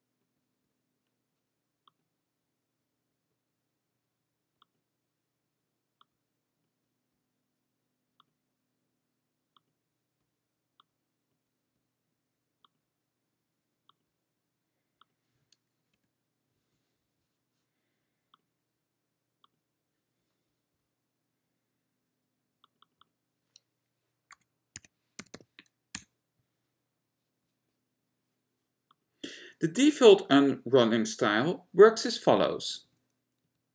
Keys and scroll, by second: 16.1 Return, 33.0 F10, 33.5 F11.